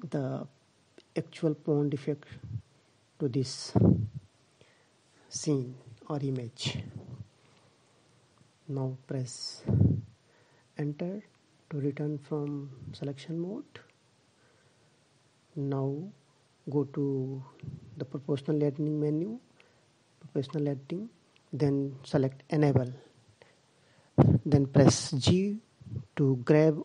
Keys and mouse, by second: 18.1-19.8 drag.